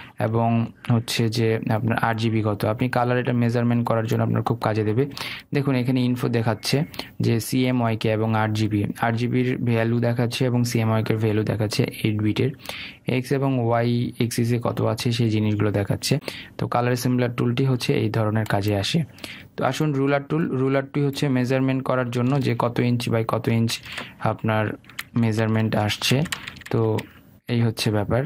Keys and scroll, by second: 22.9 ctrl+z, 24.3 ctrl+alt+z, 25.6 ctrl+z, 26.6 ctrl+alt+z.